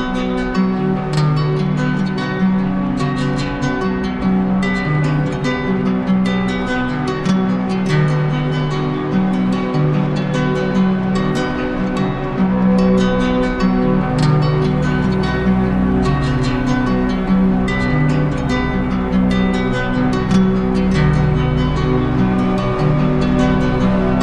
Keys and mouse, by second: 0.0 shift+right click, 1.2 right click, 2.6 alt+right click, 12.2 w, 17.2 click, 22.9 click, 23.2 ctrl+z.